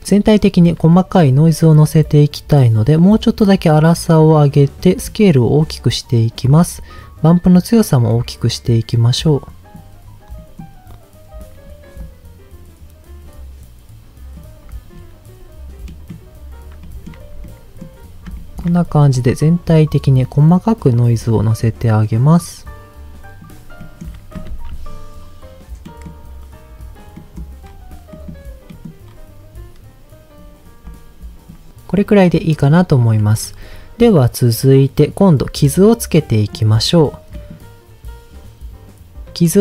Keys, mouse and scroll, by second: 0.1 middle click, 0.9 shift+middle click, 1.2 scroll up 1, 2.0 scroll up 1, 2.7-4.2 drag, 5.1-6.5 drag, 7.2-9.7 drag, 10.3 middle click, 10.7-11.4 scroll up 2, 12.0-14.3 drag, 14.9-15.9 scroll down 1, 15.9 middle click, 15.9 scroll down 1, 16.9 shift+middle click, 17.5 middle click, 18.3 shift+middle click, 20.1-23.4 drag, 23.8 middle click, 24.5 ctrl+s, 24.9-25.5 scroll down 1, 25.5-25.8 scroll down 1, 25.8 middle click, 27.1 middle click, 27.7-28.1 scroll down 1, 28.1 middle click, 28.7 middle click, 29.1-29.8 scroll up 2, 30.9 click, 31.9 middle click, 32.7-33.8 scroll down 3, 36.3 middle click, 37.0 scroll down 2, 37.3 middle click.